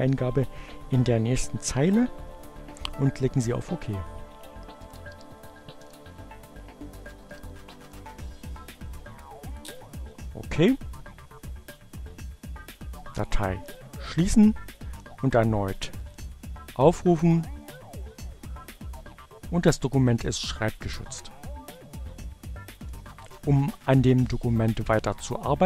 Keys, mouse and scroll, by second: 1.3-4.2 typing, 4.9 click, 8.9 click, 12.1 click.